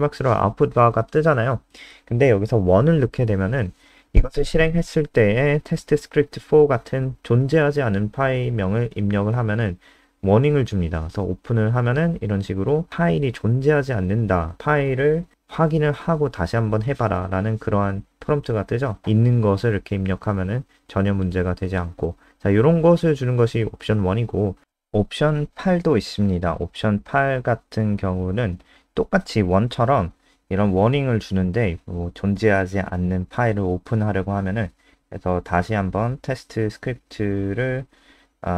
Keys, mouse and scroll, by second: 0.9 Up, 1.2 End, 1.3 Left, 1.5 Left, 1.9 BackSpace, 2.1 BackSpace, 3.2 F5, 5.3-8.3 typing, 11.0 Return, 15.5 click, 17.0 ctrl+Left, 17.1 ctrl+Left, 17.4 Right, 17.7 BackSpace, 18.6 3, 18.8 Return, 20.0 Return, 21.7 Home, 22.1 Right, 22.4 End, 23.3 click, 23.6 click, 24.0 BackSpace, 24.3 8, 31.9 Down, 32.3 ctrl+s, 32.6 F5, 37.7 click.